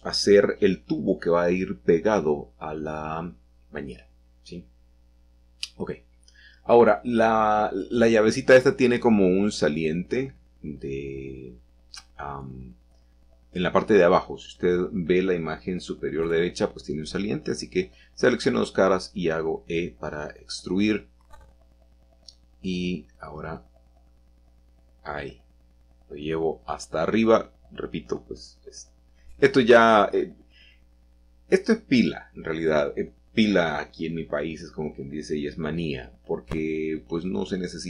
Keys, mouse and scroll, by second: 1.2-2.6 drag, 2.6 middle click, 4.5-5.2 middle drag, 4.8-5.2 scroll up 1, 6.4 shift+middle click, 8.0 shift+middle click, 8.7 middle click, 9.5 shift+middle click, 12.1-14.0 shift+middle drag, 14.0 click, 14.8 shift+click, 20.4 click, 22.1 i, 23.8 click, 24.5 e, 27.7 click, 28.1 click, 28.5-31.4 scroll down 3, 30.0-31.4 middle drag, 31.4-33.4 right drag, 33.4 click, 34.3 click, 36.2 middle click.